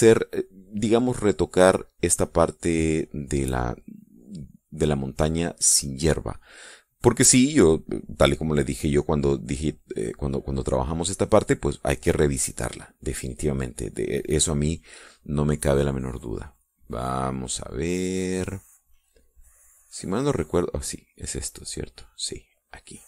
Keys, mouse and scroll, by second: 5.8-7.6 drag, 16.6-20.8 drag, 21.8 click, 22.4 click.